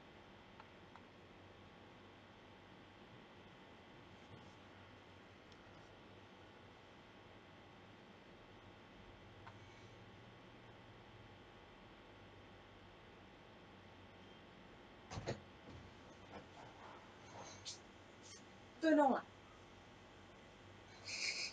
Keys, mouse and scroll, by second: 3.4 right click, 5.5-8.6 right drag, 14.8-19.8 drag.